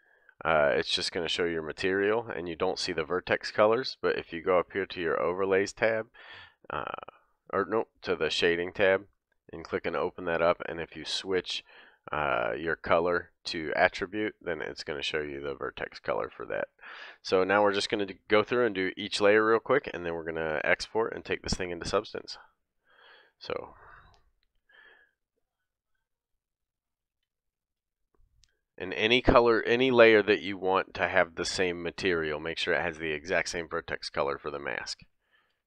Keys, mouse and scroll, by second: 0.6 middle click, 1.1-2.1 middle drag, 2.1 click, 2.2-5.6 middle drag, 5.6 click, 7.5-9.4 middle drag, 9.4-17.4 drag, 14.5 middle click, 15.4 shift+middle click, 16.0 middle click, 19.4 click, 20.0 middle click, 22.1 ctrl+Tab, 23.3 ctrl+Tab, 25.6 click, 27.6 shift+k, 35.5 ctrl+Tab, 35.6 ctrl+Tab.